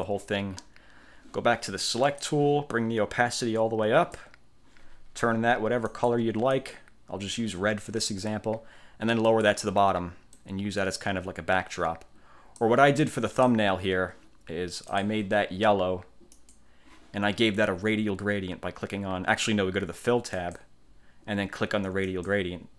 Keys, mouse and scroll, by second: 2.2 click, 3.5 click, 6.0 click, 6.7 click, 9.4 click, 10.5-13.0 drag, 13.4 click, 15.0 click, 16.5 click, 20.5 click, 22.2 click.